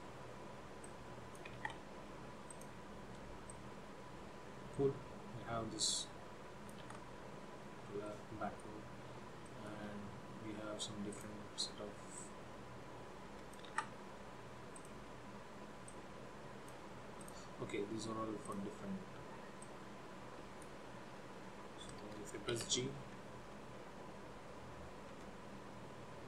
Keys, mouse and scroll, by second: 0.0-0.7 ctrl+scroll down 2, 1.0 click, 2.0 ctrl+z, 2.6 click, 3.6 click, 7.3 ctrl+z, 8.3 middle click, 9.6 shift+middle click, 11.2 click, 12.3 click, 14.2 ctrl+z, 15.0 click, 16.0 click, 17.3 click, 18.5 click, 19.8 click, 22.7 g.